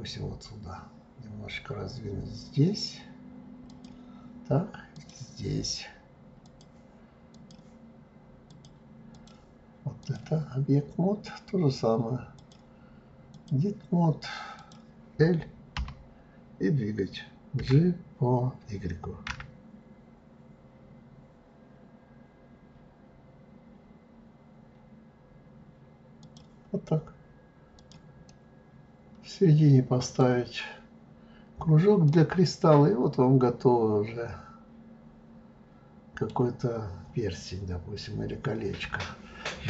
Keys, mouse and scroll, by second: 5.0 click, 6.4-7.6 drag, 8.5-10.1 drag, 12.4-14.8 drag, 15.8 l, 17.6 g, 26.9-27.8 scroll down 5, 27.8 click, 28.3-30.3 middle drag, 30.3 scroll down 1, 32.1-35.1 middle drag, 37.0 scroll up 2, 37.7-38.4 scroll up 3, 38.4-39.6 scroll down 2.